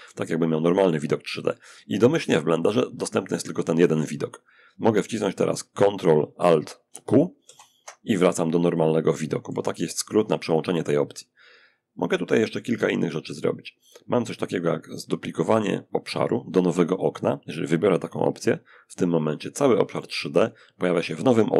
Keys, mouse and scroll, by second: 6.6 ctrl+alt+q, 7.9-9.2 shift+drag, 9.4-10.9 shift+drag, 11.5 click, 17.7 click, 19.0-21.5 alt+drag, 20.2-21.5 alt+right drag.